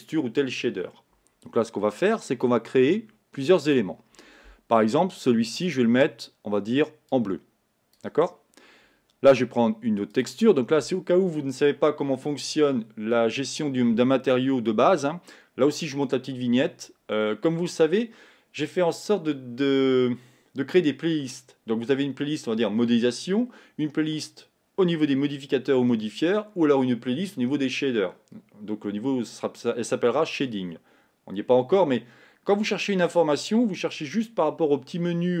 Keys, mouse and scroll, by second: 10.2-35.4 drag.